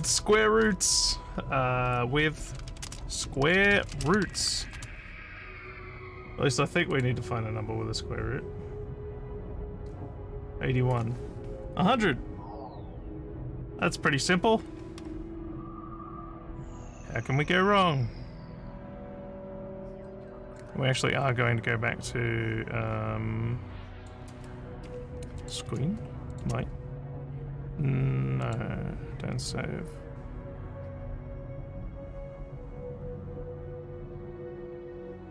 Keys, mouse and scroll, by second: 0.0-0.7 typing, 2.1-5.1 typing, 6.9 click, 20.5 click, 23.0 scroll down 3, 24.0 click, 25.4 click, 26.3 click, 28.4 click.